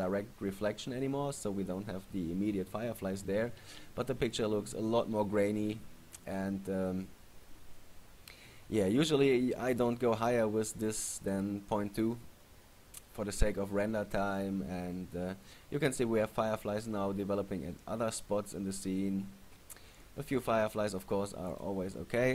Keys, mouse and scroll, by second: 11.5 click, 21.7 click.